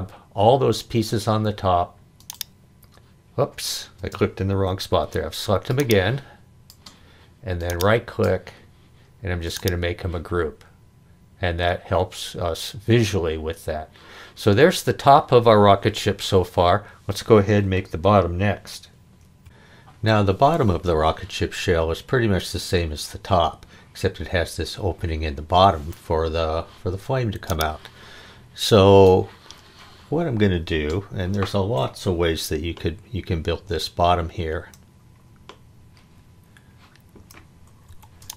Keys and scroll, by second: 4.0 space, 4.9 Escape, 37.8 h.